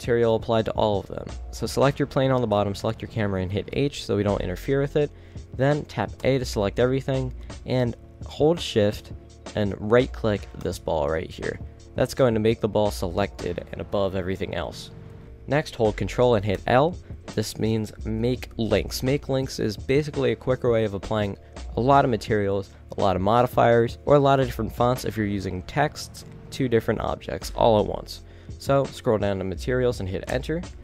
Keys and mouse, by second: 3.8 h, 6.3 a, 15.2-16.7 middle drag, 16.7 ctrl+l, 28.9 Down.